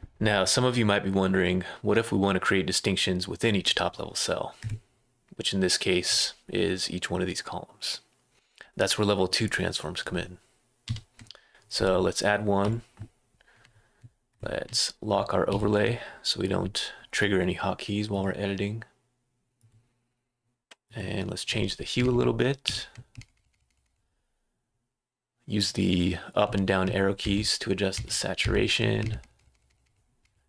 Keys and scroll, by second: 10.8 ⟲, 15.5 F5, 22.0 Right, 22.6 2, 23.1 Right, 23.3 Right, 23.5 Right, 23.8 Right, 27.9 Down, 28.4 Down, 29.0 Right, 29.3 Right.